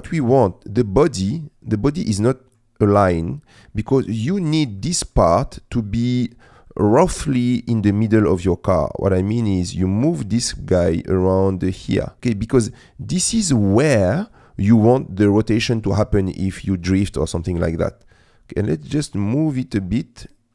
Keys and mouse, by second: 2.0 middle click, 2.9-4.1 middle drag, 4.9 middle click, 6.7 middle click, 8.9-12.2 drag, 12.2 middle click, 13.4 middle click, 14.2 middle click, 15.4 middle click, 17.5 middle click, 18.7-20.5 drag.